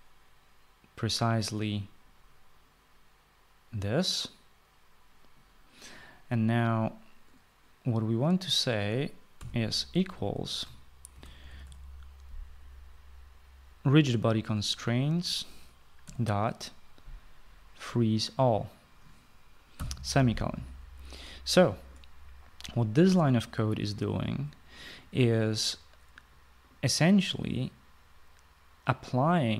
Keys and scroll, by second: 10.1 typing, 11.6-12.9 typing, 16.8 ., 20.5 ;.